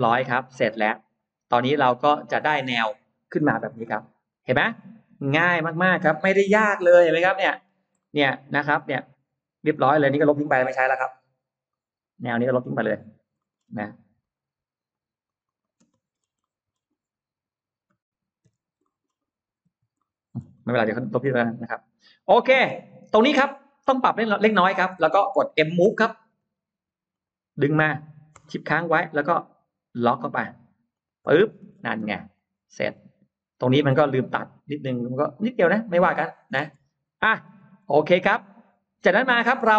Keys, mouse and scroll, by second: 0.1 middle click, 0.7 scroll down 1, 1.4-1.7 scroll up 1, 3.4 Delete, 3.8-4.2 scroll up 1, 4.0 middle click, 4.9 click, 6.5 Delete, 6.8 middle click, 6.8 scroll up 1, 7.4-7.7 scroll down 1, 7.9 middle click, 7.9 scroll up 1, 8.5 scroll up 1, 8.9 click, 10.6 Delete, 11.5 click, 12.7 click, 13.2 middle click, 13.6 space, 14.1 click, 14.6 click, 15.1 click, 15.5 click, 15.7 space, 16.0-16.9 scroll down 2, 16.3 middle click, 16.7 click, 18.3 Delete, 18.7 middle click, 19.1 click, 19.5 Delete, 19.8 middle click, 20.4-21.1 scroll up 1, 20.9 middle click, 21.2 scroll down 1, 21.5-21.9 scroll up 1, 21.9 middle click, 22.7-23.5 scroll up 2, 23.3 middle click, 23.9-24.8 scroll up 4, 24.2 click, 24.9 middle click, 26.9 click, 26.9 m, 30.8 shift+click, 31.1-32.1 middle drag, 31.8 space, 32.2 click, 32.7-33.1 scroll up 1, 33.5 middle click, 33.7 scroll down 1, 34.1-34.4 scroll up 1, 34.2-36.3 middle drag, 38.3-39.7 middle drag.